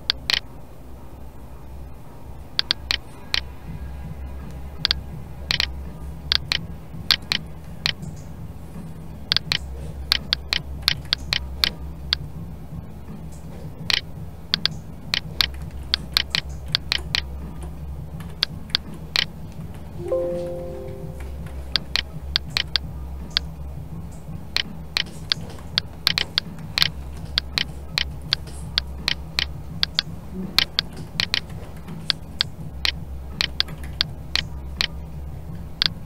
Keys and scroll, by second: 15.5 ctrl+z, 21.7 Escape.